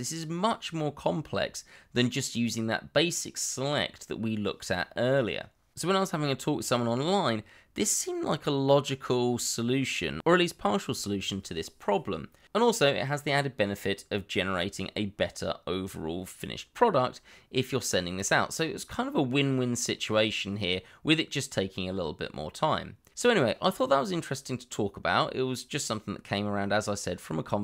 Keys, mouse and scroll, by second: 0.7 g, 2.4 r, 4.5 s, 4.8 z, 6.0 middle click, 7.4 y, 8.5 middle click, 11.1 g, 11.3 y, 12.3 x, 14.8 shift+click, 17.5 ctrl+KP_Multiply.